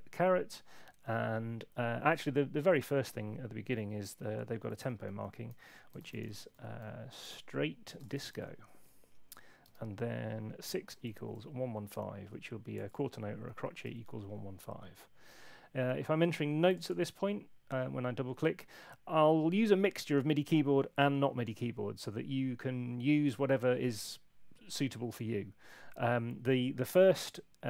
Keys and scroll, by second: 4.8-11.8 typing, 13.8 Escape.